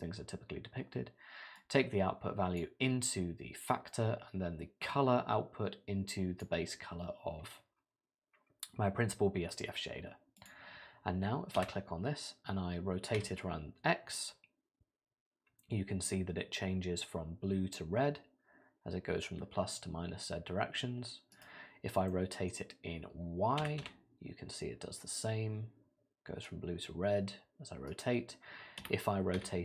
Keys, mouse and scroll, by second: 1.6 click, 4.8 click, 10.4 click, 10.8-11.6 scroll up 3, 11.6 r, 22.1 middle click, 22.7 scroll down 2, 23.6 r, 28.8 r.